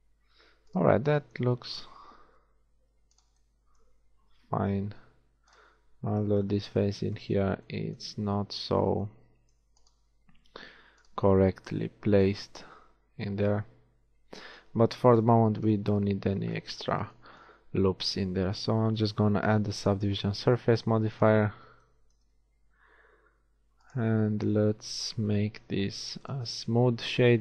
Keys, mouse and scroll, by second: 1.2-2.9 drag, 2.3 ctrl+r, 4.1 ctrl+r, 8.1-10.0 middle drag, 10.0-12.4 right drag, 11.7 a, 12.4-14.3 middle drag, 15.3 KP_1, 17.8 a, 18.7 a, 19.1 Tab, 25.5 t.